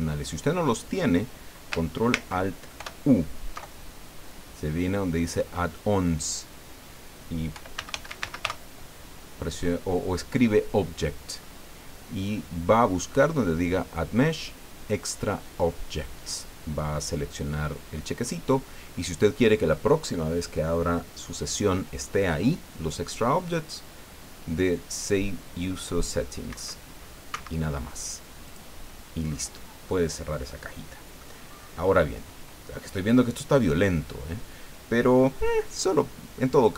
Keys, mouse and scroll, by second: 2.8 ctrl+alt+u, 6.2 click, 7.3-8.9 typing, 26.5 Escape, 27.3 Escape, 28.5 click, 29.5 scroll up 1, 30.0 scroll down 1, 30.5 click, 31.5-32.5 scroll up 3, 33.6 scroll down 1, 36.6-36.7 scroll down 1.